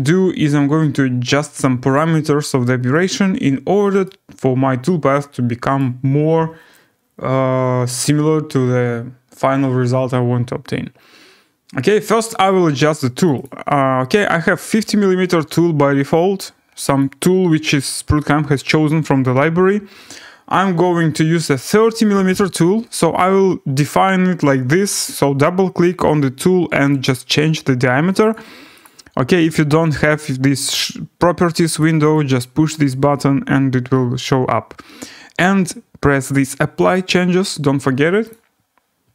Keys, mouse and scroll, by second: 5.8 right click, 13.3 click, 13.4 click, 17.0 click, 21.9-22.8 typing, 27.0 click, 28.3 click, 28.8 click, 31.8 click, 32.1 click, 36.9 click, 38.3 click.